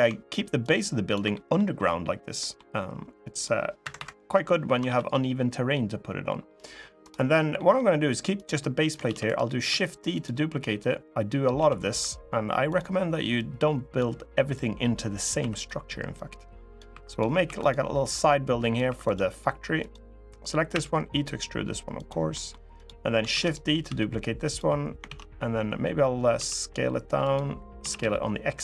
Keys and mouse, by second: 0.4 ctrl+click, 1.0 middle click, 2.1 middle click, 3.3 click, 3.7 Escape, 4.6 ctrl+r, 7.3 middle click, 8.1 click, 8.8 shift+d, 9.4 s, 9.9 click, 10.5 click, 11.3 s, 11.7 y, 12.4 click, 13.1 click, 14.3 click, 15.1 2, 15.9 click, 16.7 3, 17.2 2, 17.4 click, 17.9 click, 18.6 3, 18.8 click, 19.5 click, 20.5 e, 21.7 click, 22.1 middle click, 23.0 shift+d, 23.6 s, 24.2 click, 24.8 ctrl+z, 26.1 s, 27.0 click, 27.5 s, 27.7 x, 28.4 click.